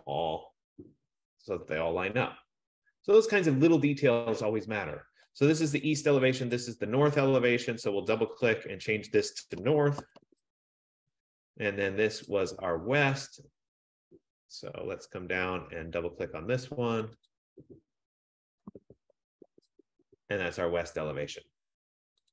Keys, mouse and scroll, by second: 0.4 click, 4.0 click, 6.5 click, 6.6 click, 7.6 click, 7.8 click, 8.4 click, 8.7 click, 9.6-10.9 typing, 12.6 click, 17.1 click, 17.5 click, 18.7-20.2 typing, 20.9 F15.